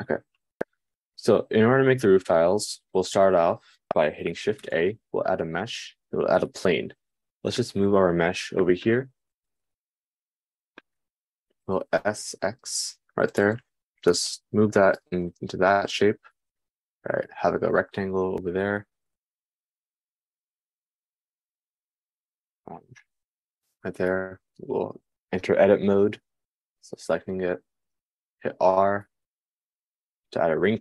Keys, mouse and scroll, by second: 0.0-1.4 middle drag, 2.2-3.3 middle drag, 5.1 shift+a, 8.4 g, 12.2 s, 25.0 Tab, 28.7 super+r.